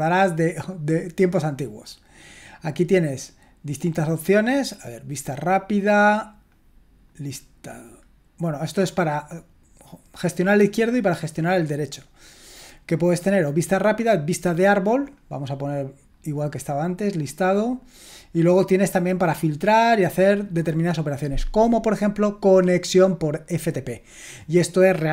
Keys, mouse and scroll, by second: 0.5 click, 5.1 click, 6.3-8.0 drag, 11.1 click, 12.5 click, 13.9 click, 15.0 click, 16.1-17.8 drag.